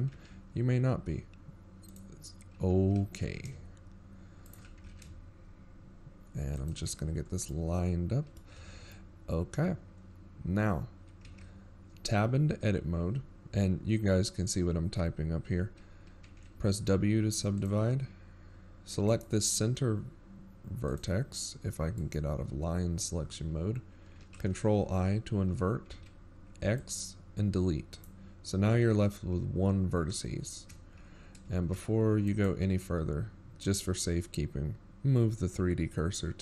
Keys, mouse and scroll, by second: 0.4-1.0 scroll up 6, 1.1 g, 8.2 scroll down 4, 8.6 middle click, 9.7 z, 10.1 middle click, 11.1 scroll down 1, 11.2-11.7 scroll up 6, 11.9-12.5 scroll up 2, 12.5 Tab, 20.4 right click, 22.2 click, 23.4 right click, 25.6 ctrl+i, 29.4 right click.